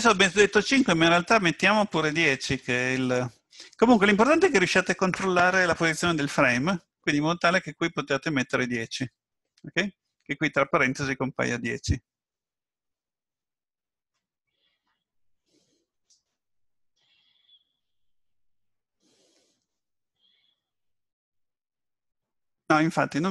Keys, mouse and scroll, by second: 0.2 click.